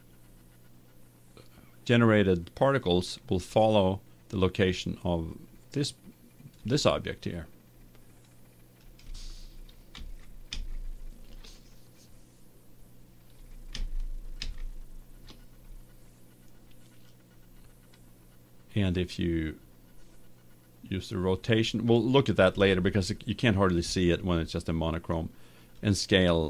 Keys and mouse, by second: 3.6-4.7 drag, 5.3-6.7 drag, 8.3-10.2 drag, 10.0 ctrl+z, 10.6 ctrl+z, 13.8 ctrl+z, 14.6 ctrl+z, 26.0-26.4 drag.